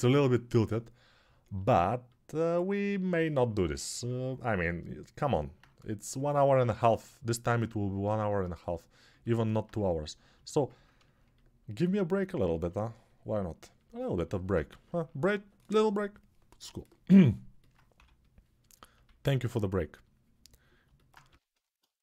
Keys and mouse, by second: 7.9-14.5 alt+shift+right drag, 17.7 6, 19.5 alt+q, 20.9-21.9 drag, 21.0 g.